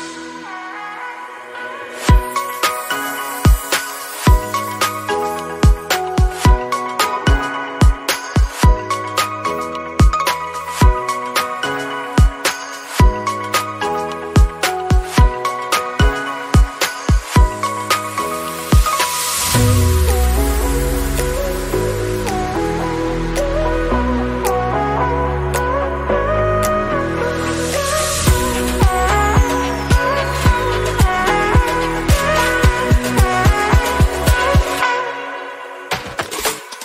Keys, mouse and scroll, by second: 0.7 click, 1.2 KP_0, 1.7 Tab, 2.1 click, 2.3-2.7 scroll up 3, 3.0 click, 3.2 click, 9.3 click, 9.8-11.1 drag, 16.2 click, 35.7 click.